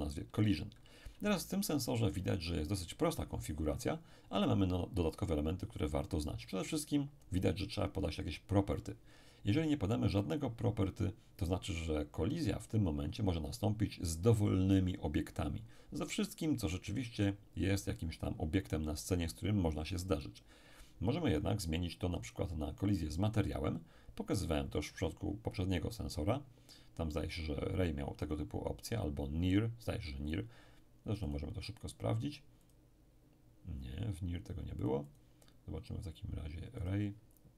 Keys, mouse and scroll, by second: 1.1 n, 22.3 click, 31.3 click, 32.7 click, 34.8 click, 36.8 click.